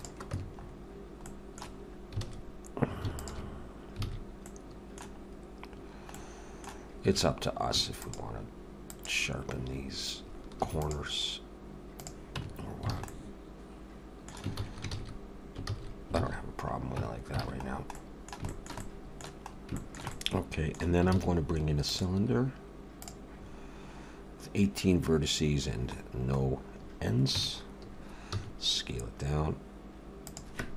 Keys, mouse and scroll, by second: 0.3 Tab, 0.6 scroll up 3, 1.2 middle click, 1.8 scroll up 1, 3.2 alt+shift+click, 4.0 alt+a, 4.5 middle click, 5.2-5.7 scroll up 1, 5.7-6.1 scroll down 1, 6.1 middle click, 6.1 scroll down 2, 7.7 ctrl+r, 10.5 ctrl+r, 12.4 Tab, 12.5-12.9 scroll down 4, 12.9 alt+a, 13.1 middle click, 14.5 ctrl+z, 14.9 ctrl+z, 15.6 ctrl+z, 16.2 ctrl+z, 17.0 Tab, 17.4 alt+a, 17.7 scroll down 2, 18.0 middle click, 18.5 shift+middle click, 18.8 middle click, 19.5 scroll up 2, 19.8 shift+middle click, 20.1 middle click, 21.1 shift+a, 23.6-24.3 scroll down 2, 26.0-26.6 scroll down 5, 27.4 Tab, 27.4-28.3 scroll down 4, 28.3 s.